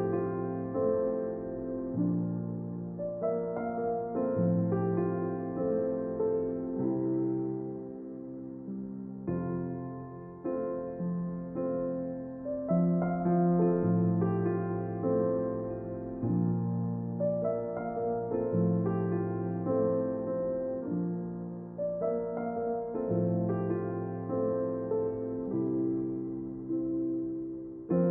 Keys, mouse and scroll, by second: 1.0 shift+z, 8.3 shift+z, 10.2 click, 12.2 r, 17.1-18.9 drag, 21.8 shift+z.